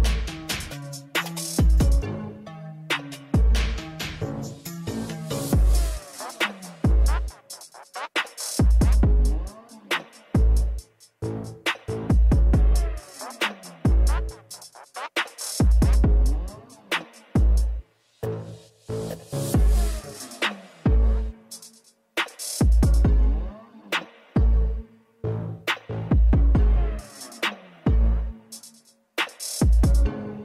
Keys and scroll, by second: 6.2 i, 15.3 i, 25.5 i.